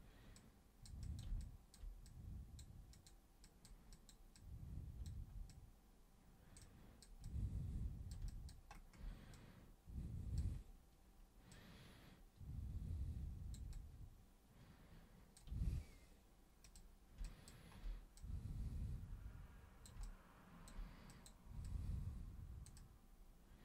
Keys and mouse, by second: 0.4 super+click, 1.0 super+click, 1.4 alt+super+click, 2.1 super+click, 2.9 super+click, 3.5 super+click, 3.9 super+click, 4.3 super+click, 5.5-6.5 super+drag, 6.6 super+click, 7.3 super+click, 8.3 alt+super+click, 9.3-10.4 super+drag, 11.5-13.5 super+drag, 13.8-15.3 super+drag, 16.7 super+click, 17.2 alt+super+click, 18.2-19.9 super+drag, 20.1 alt+super+click, 21.1 super+click, 21.7 super+click, 22.8-23.6 super+drag.